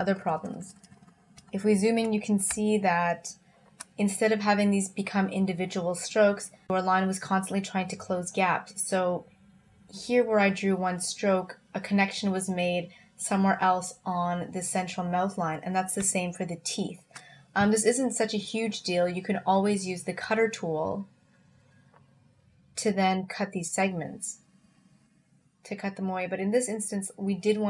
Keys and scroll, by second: 2.5 space, 16.0 space.